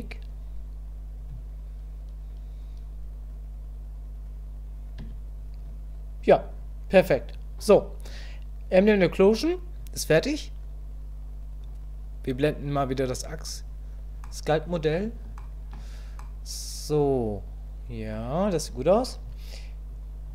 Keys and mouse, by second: 5.1 Tab, 11.6-13.2 drag, 14.2 middle click, 15.4 shift+click, 16.2-18.1 middle drag, 19.9 click.